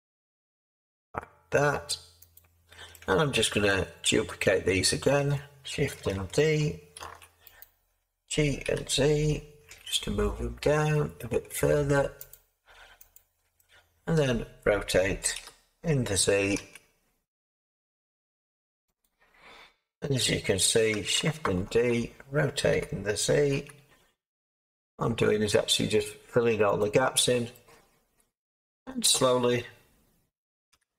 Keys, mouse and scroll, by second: 7.0 shift+d, 8.6 g, 9.7 z, 15.3 r, 16.5 z, 21.6 r, 21.6 z, 21.6 d, 22.7 r, 23.5 z, 30.7 g.